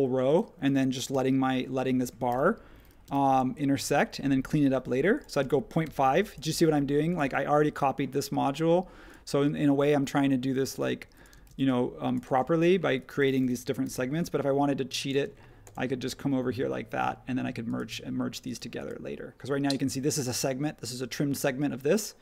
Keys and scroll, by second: 1.1 ,, 2.3 ,, 3.0 m, 5.4 space, 7.2 ⟲, 11.3-12.2 typing, 13.8 p, 15.1 space.